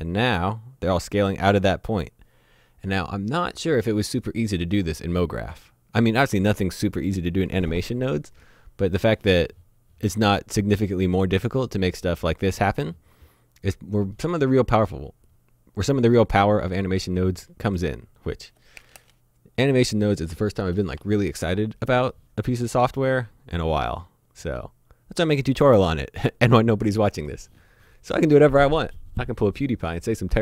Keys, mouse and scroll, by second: 8.6 click, 24.0 click.